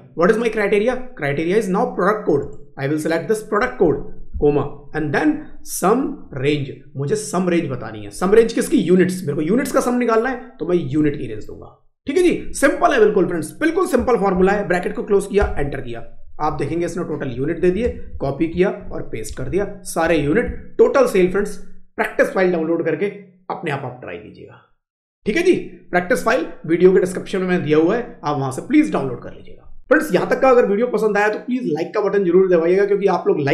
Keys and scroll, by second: 16.4 Up, 17.5 ctrl+c, 18.7 ctrl+v, 19.3 Down, 19.9 Up, 20.4 Right.